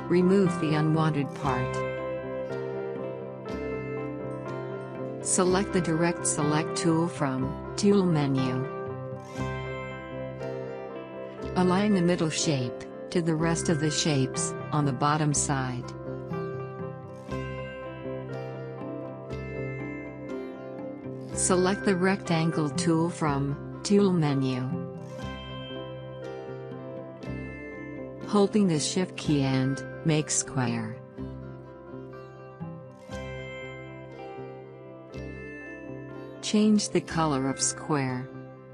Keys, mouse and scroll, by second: 4.1 scroll down 1, 6.8-7.3 scroll up 2, 7.9 click, 9.7 alt+scroll up 1, 10.4 space, 10.5-24.4 drag, 27.4 right click, 28.7 click, 33.3-38.7 drag.